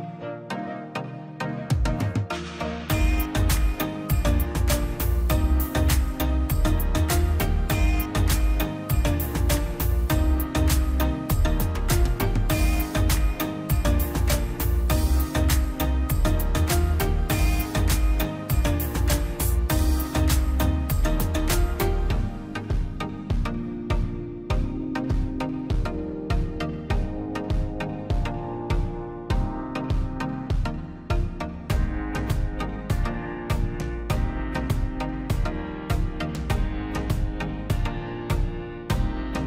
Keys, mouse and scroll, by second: 0.8 click, 2.7 scroll up 1, 3.3 middle click, 3.8 click, 4.0 scroll down 1, 5.1 click, 6.0 middle click, 6.1 scroll down 1, 6.3 middle click, 6.6 click, 6.9 space, 7.1 click, 7.3 p, 7.4 click, 7.9 space, 8.0 click, 8.2-8.5 scroll down 1, 8.5 middle click, 8.9 scroll down 1, 9.7 l, 9.9-10.8 scroll up 1, 11.4 click, 12.2 scroll up 1, 12.4 space, 12.8 l, 13.2 click, 13.9 space, 14.1 p, 14.3 click, 14.6 scroll down 1, 15.2 click, 16.3 scroll down 1, 16.7 middle click, 17.5 click, 17.7 scroll down 1, 17.9 middle click, 18.1 scroll up 1, 18.8 middle click, 19.4 scroll up 2, 19.5 click, 20.1 middle click, 20.4 scroll down 1, 22.2 middle click, 22.8 scroll up 1, 23.8-25.3 middle drag, 25.3 click, 26.4-26.9 scroll down 1, 29.2 Escape, 29.6 ctrl+z, 30.2 l, 30.4-30.9 scroll up 1, 31.1 click, 33.4 click, 33.9-34.8 scroll down 1, 35.4 click, 35.6 space, 35.9 middle click, 36.2 scroll down 1, 37.0 scroll up 1, 37.5-39.4 typing, 37.8 click, 38.4 scroll down 1, 39.3 click.